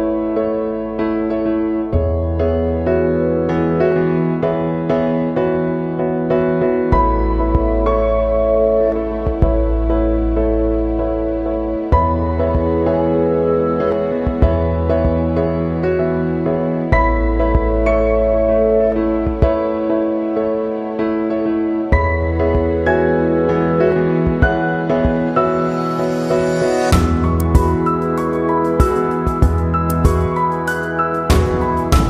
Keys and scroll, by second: 6.9 Right, 8.3 Down, 9.3 Left, 10.0 Down.